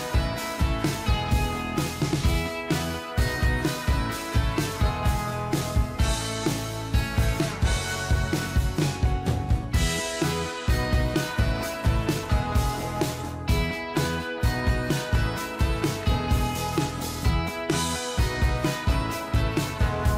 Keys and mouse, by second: 1.1 ctrl+j, 6.5 ctrl+j, 7.3 shift+click, 10.2 ctrl+j, 10.9 shift+click, 13.5 ctrl+j, 15.4 shift+click, 20.0 shift+click.